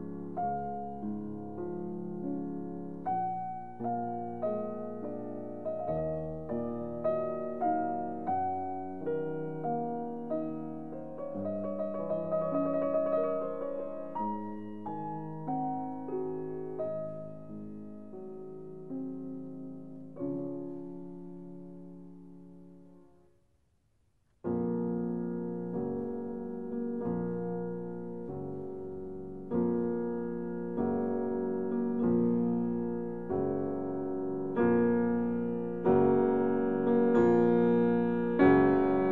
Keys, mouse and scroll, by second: 0.9-8.2 middle drag, 8.2 e, 9.1 z, 21.5 click, 22.7 middle click, 31.2 middle click, 31.5 ctrl+r, 34.1 ctrl+r, 34.2 2, 35.5 click, 35.6 click.